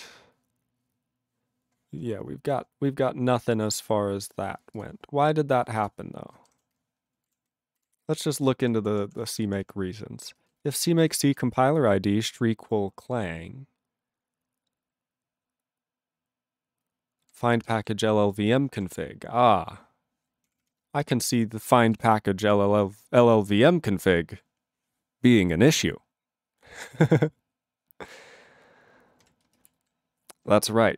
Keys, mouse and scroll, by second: 4.8 ctrl+n, 5.1-5.8 scroll, 5.8 click, 6.5 alt+<, 7.4 ctrl+n, 7.4 ctrl+n, 7.9 ctrl+n, 8.4 ctrl+n, 8.4 ctrl+n, 8.5 ctrl+p, 8.8 ctrl+p, 8.9 ctrl+p, 9.1 ctrl+p, 9.2 ctrl+p, 9.6 ctrl+p, 10.3 ctrl+space, 10.7 ctrl+alt+f, 11.0 ctrl+alt+f, 17.2 ctrl+g, 17.3 ctrl+n, 17.4 ctrl+space, 17.9 ctrl+alt+b, 22.1 ctrl+alt+b, 26.7 ctrl+g, 29.1 ctrl+n, 29.2 ctrl+e, 29.4 ctrl+space, 29.9 ctrl+alt+b.